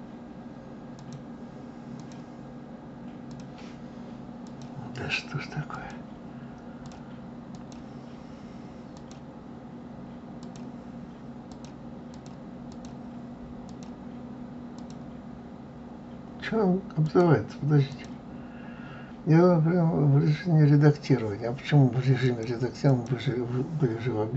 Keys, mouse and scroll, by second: 0.9 click, 2.0 click, 3.2 click, 4.4 click, 5.7-6.9 drag, 7.5 click, 8.9 click, 10.4-11.6 drag, 12.1 click, 12.7 click, 13.6 click, 14.7-17.1 drag, 17.9 click, 22.2-24.3 drag.